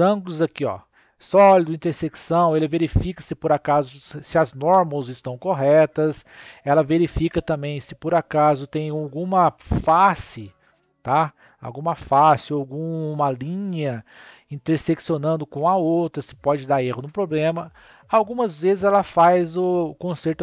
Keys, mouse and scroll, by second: 6.5-9.6 middle drag.